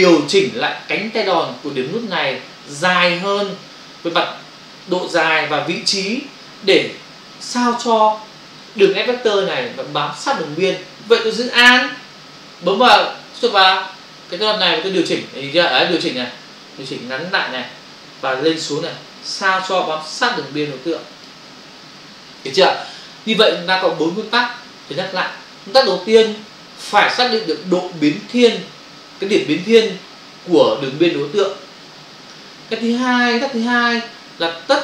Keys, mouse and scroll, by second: 14.8 alt+click.